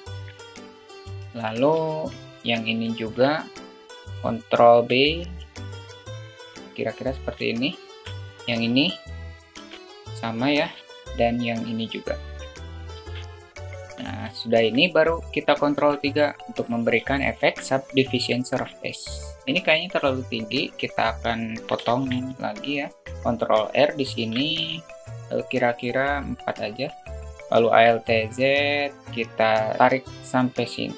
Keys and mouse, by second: 1.3 Tab, 1.6-1.9 middle drag, 2.6 Tab, 2.7 shift+middle click, 3.9 click, 4.7 ctrl+b, 7.4 alt+shift+middle click, 8.3 click, 9.3 ctrl+b, 11.7 click, 11.9 drag, 12.8 ctrl+b, 14.0 Tab, 14.2 alt+shift+middle click, 15.8 ctrl+3, 16.6 click, 16.9-17.3 alt+shift+middle drag, 21.7 shift+middle click, 22.2 Tab, 24.0 ctrl+r, 24.2 ctrl+r, 27.5 alt+z, 29.1-30.5 drag.